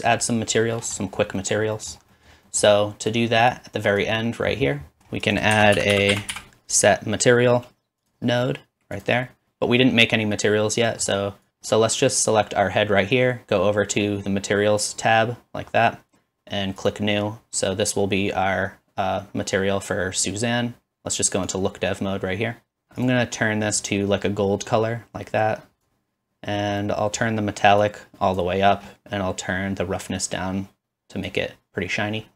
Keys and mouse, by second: 3.1 middle click, 3.1 right click, 5.6 shift+a, 5.9 s, 11.3-16.8 drag, 19.3-21.5 middle drag, 21.5-28.6 drag, 23.0 right click, 28.0 middle click, 28.0 right click, 32.0 middle click.